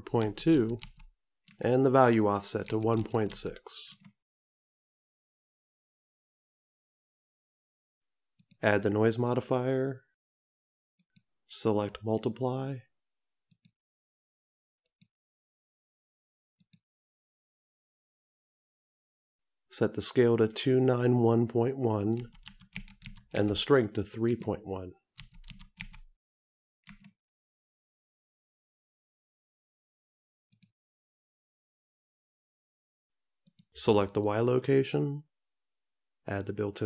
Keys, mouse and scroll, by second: 9.3 click, 13.7 click, 16.8 click, 34.2 click.